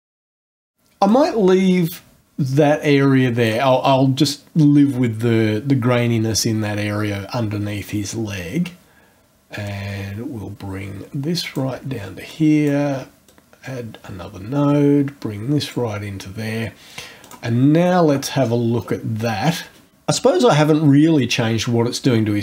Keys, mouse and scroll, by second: 0.0 click, 1.1-3.7 drag, 9.7-11.7 drag, 12.3 ctrl+click, 13.3-15.9 ctrl+drag, 17.2 click, 18.3 scroll down 1, 18.4-19.0 scroll up 2, 19.0 scroll down 1, 19.1-19.5 scroll up 1.